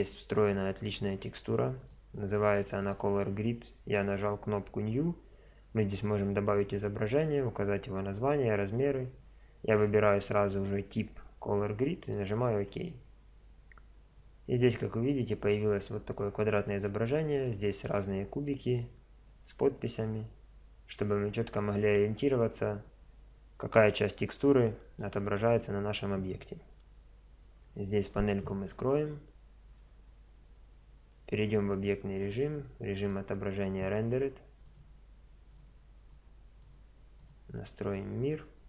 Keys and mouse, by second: 27.9 t, 29.8 Tab, 31.2 z, 33.1 click, 33.8-34.9 drag, 36.8 drag, 37.0 click.